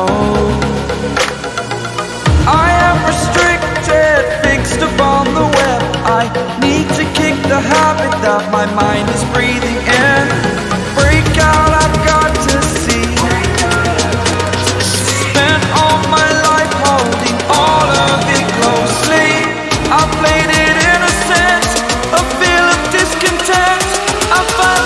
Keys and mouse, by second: 13.5 click, 14.9 right click, 17.3 click, 19.9 click, 23.3-24.3 drag.